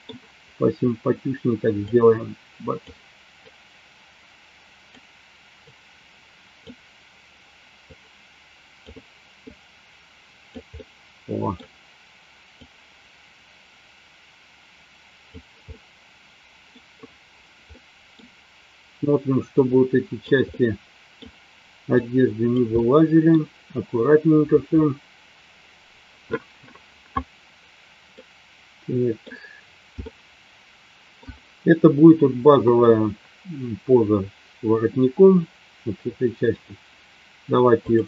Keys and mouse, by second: 1.8 click, 3.4-4.9 drag, 6.0 click, 7.8-8.8 drag, 9.4-10.5 drag, 10.7 middle click, 13.3-15.3 drag, 15.6-16.8 middle drag, 17.6 middle click, 19.8 click, 20.4 middle click, 21.9 click, 22.8 middle click, 28.0-29.3 middle drag, 30.0 shift+middle click.